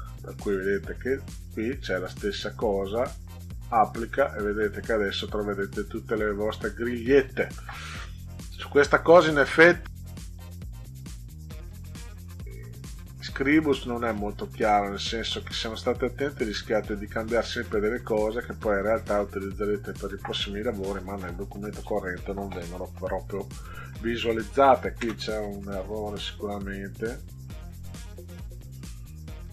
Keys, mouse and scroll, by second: 1.4 click, 2.8 click, 4.1 click, 5.5-6.6 middle drag, 9.9 click, 12.1 click, 21.3 click, 24.0 ctrl+scroll up 2, 25.5 click, 27.2 click, 27.8 click.